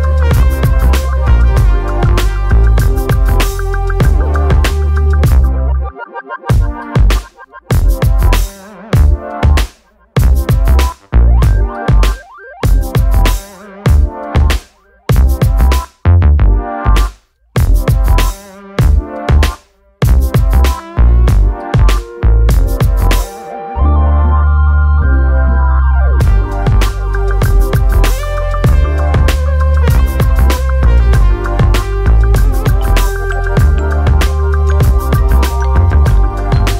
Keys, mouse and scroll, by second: 0.1 click, 2.1 alt+middle click, 4.8 F4, 6.6 middle click, 8.1 click, 11.6 click, 13.1 click, 14.9 click, 16.1 click, 16.7 click, 18.1 click, 18.4 F4, 19.0 alt+middle click, 19.6 alt+middle click, 19.8-20.2 scroll up 1, 20.3-20.9 scroll up 1, 21.6 click, 22.4 click, 23.4 click, 23.5 click, 26.2 click, 27.0 middle click, 27.8 middle click, 27.8 alt+middle click.